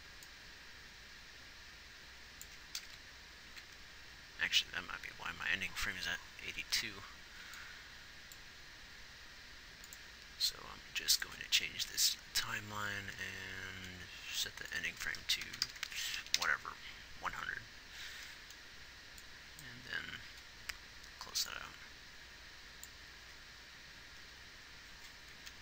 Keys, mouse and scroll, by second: 3.3 shift+Right, 23.5 alt+a.